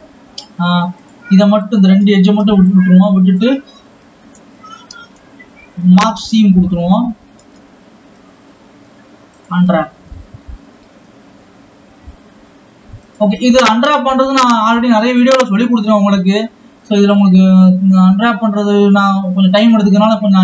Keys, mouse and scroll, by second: 10.6 alt+a, 13.4 click, 16.8 click, 19.3 click.